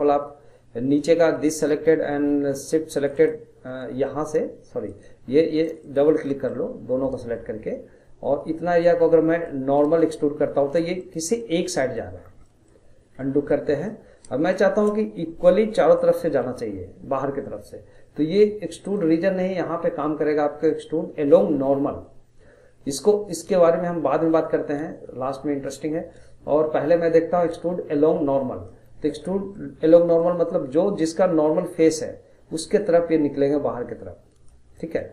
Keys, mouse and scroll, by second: 0.9-3.0 middle drag, 3.0 shift+click, 3.1 shift+click, 4.1 middle click, 4.9 click, 5.6 shift+click, 6.5-9.4 middle drag, 9.4 click, 11.0-12.2 middle drag, 12.2 scroll, 12.4 middle click, 13.2 ctrl+z, 13.7 middle click, 14.0 scroll up 2, 14.5-19.0 shift+middle drag, 19.0-22.1 drag, 29.2 middle click, 30.1 click, 34.7-35.1 middle drag.